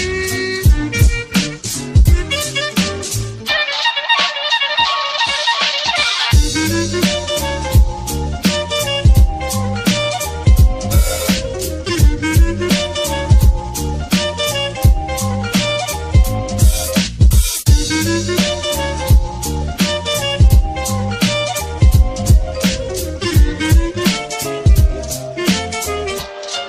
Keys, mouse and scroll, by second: 1.3 space, 7.0 ctrl+-, 7.1 space, 13.0 ctrl+-, 13.2 ctrl++, 13.5 ctrl++, 13.6 ctrl++, 15.0 ctrl+-, 15.4 ctrl++, 16.7 space, 19.4 space, 20.9 space, 23.6 space, 25.0-26.6 typing.